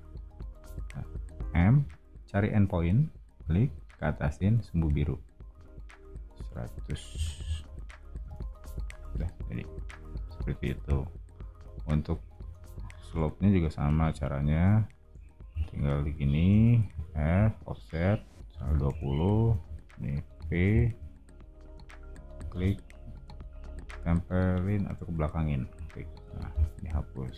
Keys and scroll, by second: 1.4 m, 4.8 Up, 6.8-8.2 typing, 10.2 o, 12.4 space, 16.8 f, 18.2-20.3 typing, 26.3 e.